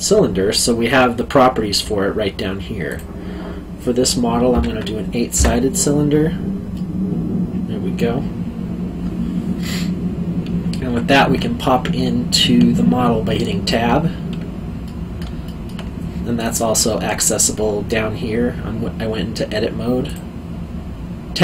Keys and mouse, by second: 2.9 click, 4.5 KP_8, 6.7 middle click, 13.7 Tab, 14.8 middle click, 15.4 alt+middle click, 16.4 click, 20.0 click.